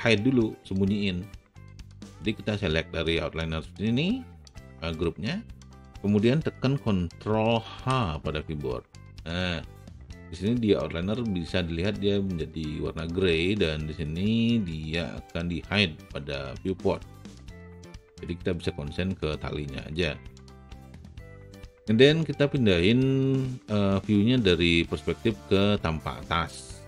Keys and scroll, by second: 7.8 ctrl+h.